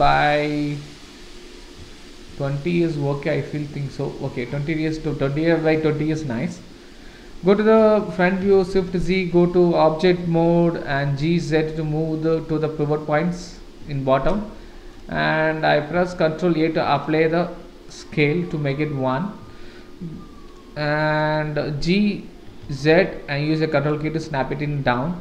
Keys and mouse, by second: 1.1 click, 2.7-3.5 middle drag, 4.7-6.0 middle drag, 6.4 click, 7.8 KP_1, 8.5 shift+z, 9.1 Tab, 10.9 g, 13.8 Tab, 14.6 shift+middle drag, 15.9 ctrl+a, 18.7-19.1 middle drag, 21.2 KP_1, 22.4 g, 24.2-25.2 middle drag.